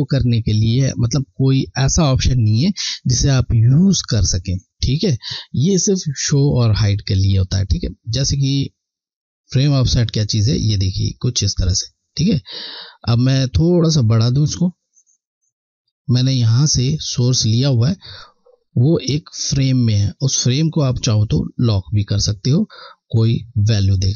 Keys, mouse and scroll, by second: 0.0-0.3 alt+scroll down 1, 9.1 click.